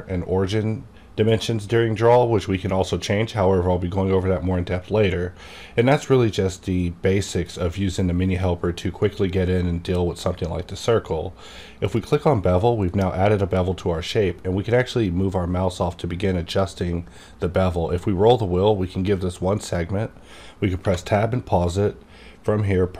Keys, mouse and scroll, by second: 11.8-14.3 drag, 17.8 click, 17.8-19.7 scroll down 1, 19.7 scroll down 1, 20.8 Tab, 22.1-22.6 scroll down 1.